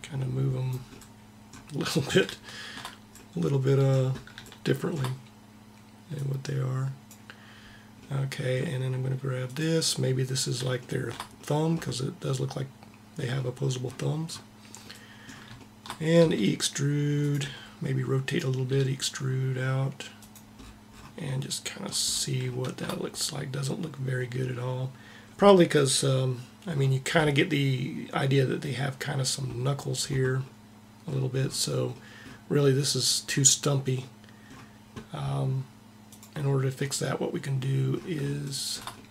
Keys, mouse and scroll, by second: 5.8-7.6 drag, 9.1-10.8 drag, 15.8 e, 17.1 r, 18.3 e, 35.7-38.8 drag.